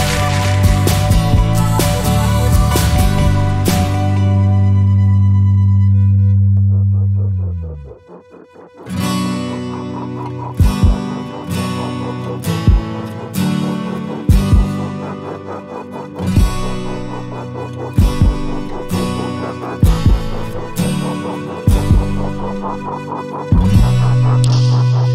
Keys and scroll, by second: 17.8 Escape, 19.9 Escape.